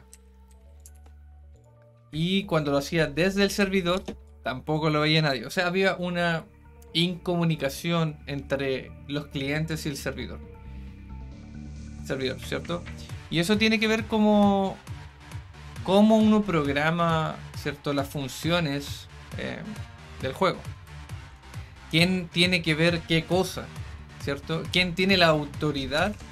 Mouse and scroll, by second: 1.5 click, 4.2-5.3 right drag.